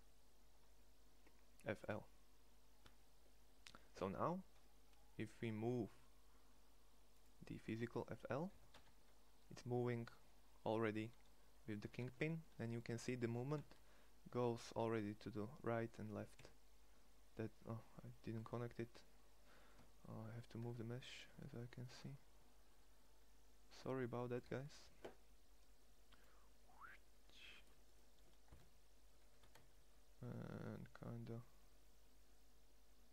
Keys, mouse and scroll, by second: 7.4 click, 8.1 g, 12.9 g, 19.3 Tab, 20.2 Tab, 20.9 Tab, 21.7 Tab, 24.1 a, 24.4 c, 28.1 ctrl+l, 28.9 g.